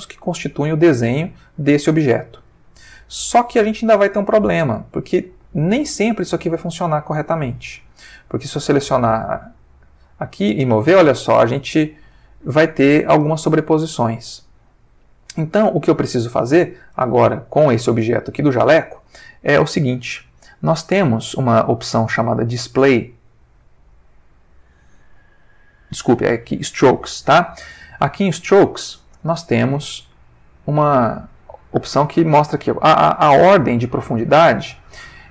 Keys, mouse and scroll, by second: 1.8 Tab, 2.3-4.3 middle drag, 4.5-7.8 ctrl+middle drag, 8.6 click, 9.5 g, 11.9 Escape, 13.4 click, 14.5 ctrl+middle click, 15.8 click, 16.8 middle click, 17.8 g, 18.6 Escape, 20.6 middle click, 22.5 click, 23.3 click, 25.0 middle click, 26.3 click, 26.8 middle click, 29.4-30.5 ctrl+middle drag.